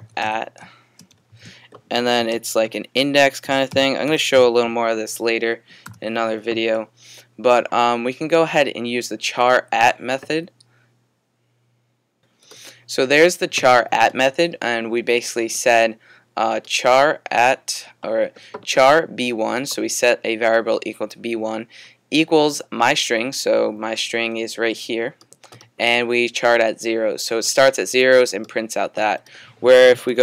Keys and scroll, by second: 0.0-5.9 typing, 7.3 typing.